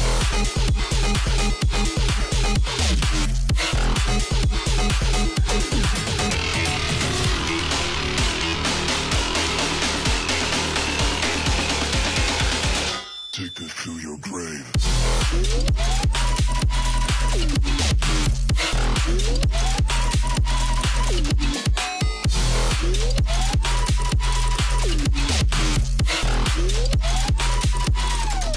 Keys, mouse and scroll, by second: 0.1 alt+scroll down 1, 0.2 click, 0.6 alt+scroll up 1, 0.8 a, 1.1-2.6 drag, 3.1 ctrl+z, 3.7 click, 4.5-5.7 shift+drag, 6.6-7.2 alt+scroll up 1, 7.2 click, 8.3 alt+scroll down 1, 8.4 space, 8.5 click, 9.2 Up, 10.7 Down, 11.2 click, 12.5 alt+scroll down 1, 13.1 space, 13.2-15.8 drag, 16.9 alt+scroll up 1, 17.5-18.2 scroll down 1, 18.4-21.7 alt+drag, 21.7 Up, 23.2 click, 24.1-24.7 alt+scroll down 1, 25.0-26.1 drag.